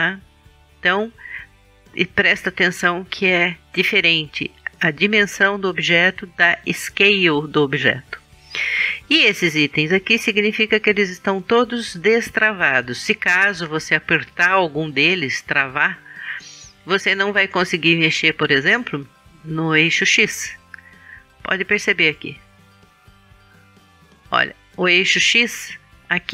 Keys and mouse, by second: 15.8-17.7 drag, 23.5-25.3 drag.